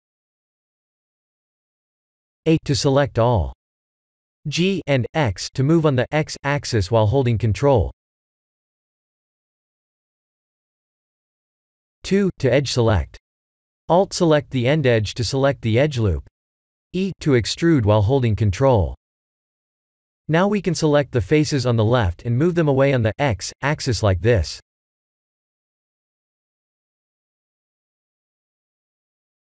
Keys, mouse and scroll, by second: 0.8 a, 5.0 g, 5.7 x, 7.1 ctrl+click, 8.3-9.3 middle drag, 9.8 2, 10.3-11.8 middle drag, 12.8 alt+click, 13.8 KP_1, 15.4 e, 16.7 ctrl+click, 18.9 click, 20.7 3, 23.1 b, 27.8 g, 28.3 x.